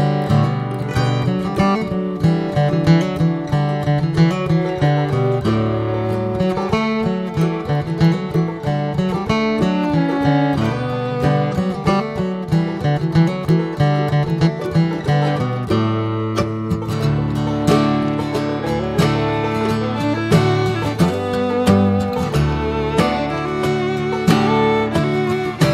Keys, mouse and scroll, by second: 0.0-0.3 middle drag, 0.3-0.7 scroll down 8, 0.7 middle click, 0.9 scroll up 2, 1.3 ctrl+s, 1.9 drag, 2.7 alt+middle click, 3.5 alt+middle click, 4.2 alt+middle drag, 5.0 alt+middle click, 5.5 alt+scroll up 1, 7.1 ctrl+s, 7.3 ctrl+a, 8.5-8.8 scroll down 11, 9.1 alt+middle click, 9.6 scroll up 2, 10.0-12.0 shift+middle drag, 12.0 shift+d, 15.3 shift+r, 15.7 shift+r, 18.1-20.1 middle drag, 20.1 drag, 20.3 scroll down 3, 20.6-20.9 middle drag, 20.9 drag, 21.3-22.5 middle drag, 22.5 scroll up 1, 22.7-23.6 middle drag, 23.6 scroll up 2, 23.9-24.3 middle drag, 24.3 scroll down 4, 24.8 alt+z, 25.3 click.